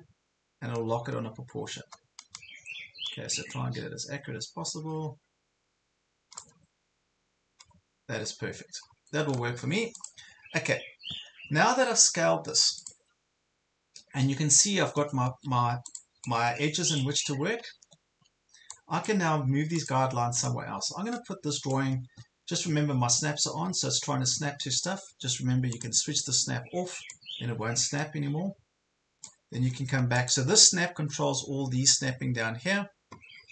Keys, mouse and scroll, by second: 6.9 ctrl+scroll up 1, 8.2 ctrl+scroll down 1, 10.0 click, 15.0 Left, 15.4 Left, 16.0-17.4 drag, 18.0 ctrl+scroll up 1, 18.7 click, 22.3-23.4 typing, 25.7-29.4 drag.